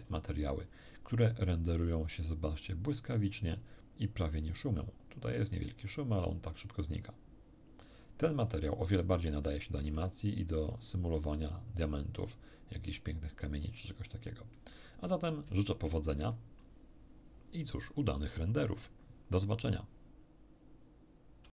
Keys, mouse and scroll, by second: 3.3 scroll up 1, 4.4-4.7 scroll up 2, 5.9 scroll up 2, 8.1 scroll down 2, 9.4 shift+middle click, 10.6 shift+middle click, 11.1-14.3 middle drag, 14.5-15.5 middle drag, 15.6 shift+middle click, 16.3 shift+middle click, 17.8-18.1 scroll down 2, 21.4 q.